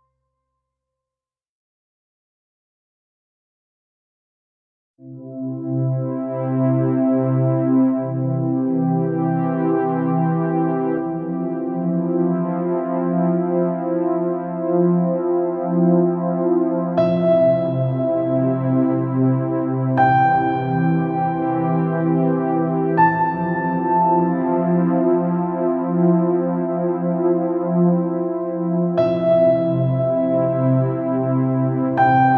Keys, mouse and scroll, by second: 3.1-4.3 middle drag, 4.3 s, 7.5 r, 14.3-17.6 middle drag, 15.5 KP_3, 20.0 z, 21.0-23.1 drag, 23.6 z, 25.5 middle click, 28.2-29.4 middle drag, 29.4-31.2 drag, 31.3 click, 31.4 shift+d.